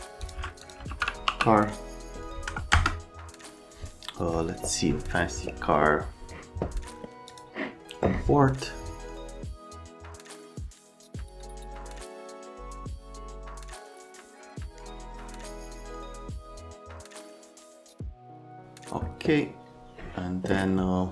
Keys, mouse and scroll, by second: 0.2 click, 0.5-1.7 typing, 0.6 click, 2.5 KP_Enter, 2.7 KP_Enter, 7.3 click, 9.4 click, 9.6-10.4 typing, 9.7 scroll up 1, 9.8 click, 10.1 right click, 10.5 middle click, 10.7 alt+right click, 10.7 alt+middle click, 11.6 click, 11.9 middle click, 12.2-13.8 typing, 13.5 right click, 13.6 middle click, 14.7 middle click, 15.4-16.7 typing, 15.6 F3, 15.9 click, 16.3 click, 16.5 right click, 16.9 click, 17.0 right click, 17.3 click, 17.6 click, 18.0 click, 18.2 click.